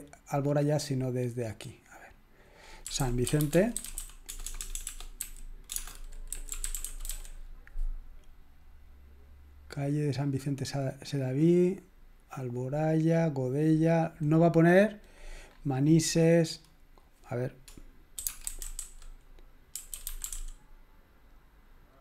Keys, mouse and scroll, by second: 0.6 scroll up 1, 1.2-2.0 scroll up 1, 2.6 click, 2.8-7.5 typing, 18.2-20.8 typing.